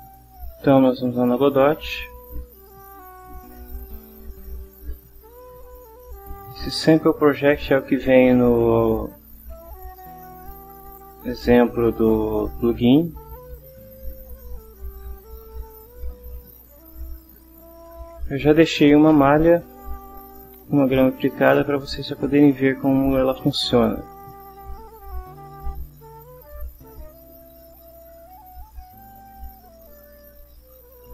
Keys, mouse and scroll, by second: 2.6 click, 6.3 click, 9.7 click, 20.5-21.6 shift+middle drag, 22.0 shift+middle click, 22.8 click, 24.7 ctrl+click, 24.9 ctrl+middle click, 25.1 scroll down 2, 25.7-26.0 scroll down 2, 28.6-30.2 shift+middle drag.